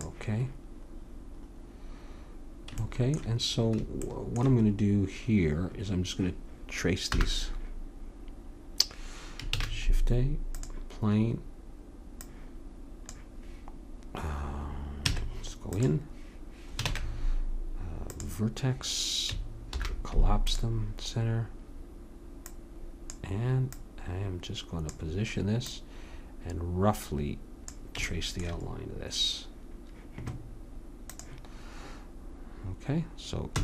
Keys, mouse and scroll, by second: 0.3 click, 1.2 click, 1.8-2.9 middle drag, 7.1 n, 9.5 shift+a, 12.2-14.0 drag, 15.1 Tab, 16.9 ctrl+Tab, 19.7 alt+m, 22.5-25.5 drag, 25.7-27.6 drag, 28.1-30.0 middle drag, 31.1-32.9 drag, 33.5 e.